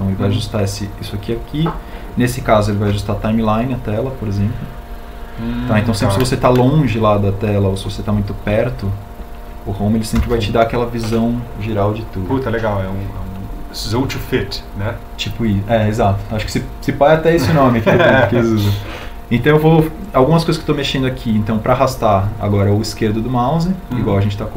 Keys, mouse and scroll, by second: 4.3 Home.